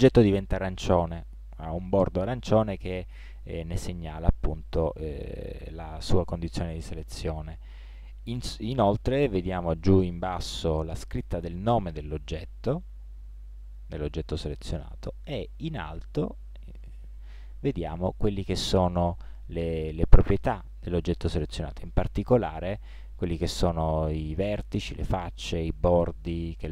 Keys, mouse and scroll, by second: 0.2 right click, 4.5-7.3 right drag, 13.2 right click.